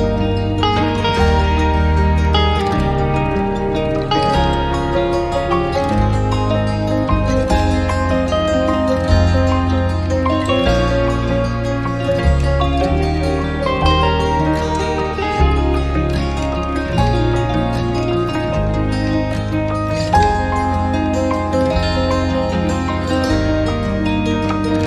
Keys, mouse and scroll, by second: 1.2 BackSpace, 6.9 right click, 9.3 right click, 15.7 alt+click, 19.5 alt+click, 21.5 alt+middle click, 24.6 alt+middle click.